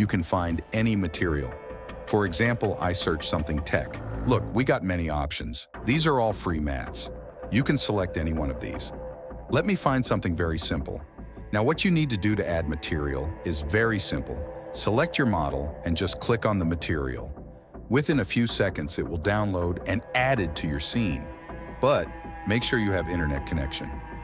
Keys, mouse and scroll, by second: 21.2 n, 22.4 n.